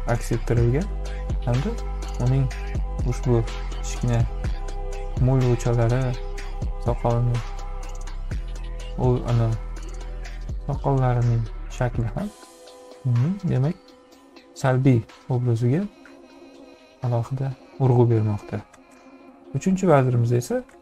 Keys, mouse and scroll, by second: 6.0 click, 7.1 click, 10.1-11.6 drag, 12.4-14.8 drag.